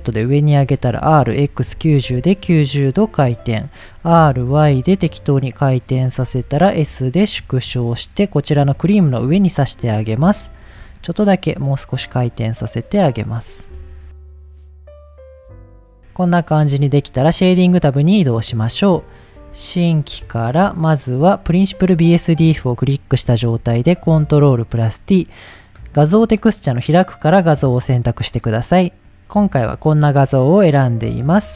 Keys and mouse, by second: 0.3 click, 0.6 r, 1.0 x, 1.4 KP_9, 2.1 KP_Enter, 4.1 r, 4.5 y, 5.8 click, 6.2 s, 7.3 click, 7.4 g, 7.6 z, 8.3 click, 9.2 KP_3, 10.8 r, 11.3 click, 11.5 g, 13.1 click, 13.4-13.7 middle drag, 13.8 click, 14.1 middle click, 14.4 click, 14.5 s, 14.7 click, 14.8 g, 14.8 z, 14.9 click, 15.3 middle click, 15.5 click, 15.6 s, 17.6 drag, 19.2 drag, 19.7 shift+middle click, 21.6 drag, 23.4 ctrl+t, 24.3-25.0 drag.